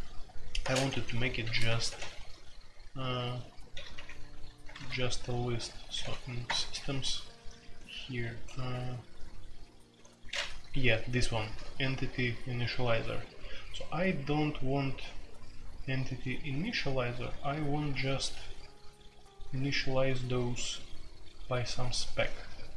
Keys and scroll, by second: 0.6-1.9 typing, 3.7-4.7 typing, 5.9 typing, 6.4 Return, 7.6 ctrl+d, 7.8 ctrl+d, 8.0-8.8 typing, 10.6-14.7 typing, 17.3 typing, 19.8-20.7 typing, 21.9-22.7 typing.